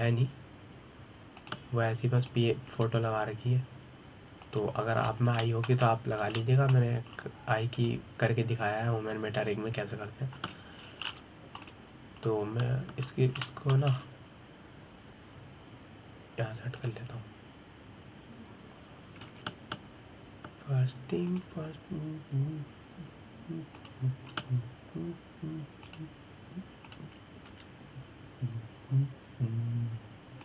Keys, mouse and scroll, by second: 0.1 g, 3.8 click, 4.4 g, 6.7-7.1 scroll up 3, 7.1 shift+middle click, 7.5-8.1 scroll up 2, 8.1 shift+middle click, 8.8-9.4 scroll down 2, 9.4 click, 12.1 l, 13.3 click, 14.7-15.1 scroll down 2, 15.1-15.6 shift+middle drag, 15.6-18.4 scroll up 3, 18.4 click, 20.9 g, 23.0 click, 25.4 click, 26.0 g, 28.5 click, 29.1 g.